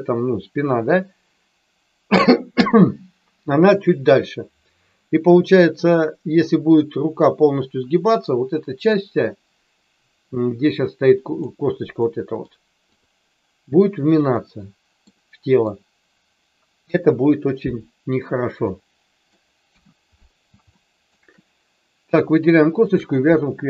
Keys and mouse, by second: 12.0 middle click, 12.9 click, 14.4 middle click, 15.1 middle click, 16.7 KP_1, 18.6 middle click, 20.7 shift+middle click, 22.8 shift+click.